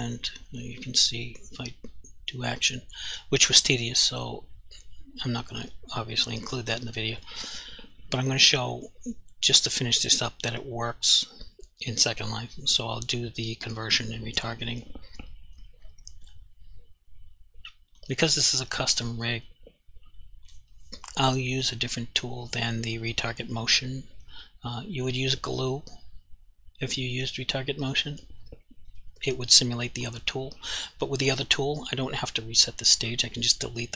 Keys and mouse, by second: 0.8 click, 16.3 click, 20.5 click.